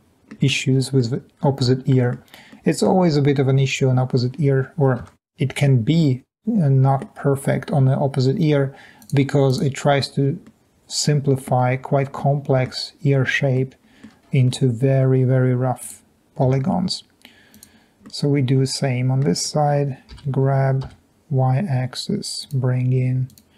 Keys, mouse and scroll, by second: 0.0 middle click, 0.1 middle click, 5.2 Tab, 6.7 middle click, 10.5-11.4 middle drag, 12.2-12.7 middle drag, 13.5-14.0 middle drag, 14.8 middle click, 14.8 scroll up 2, 16.7 Tab, 18.4 middle click, 20.3 g, 21.0 y.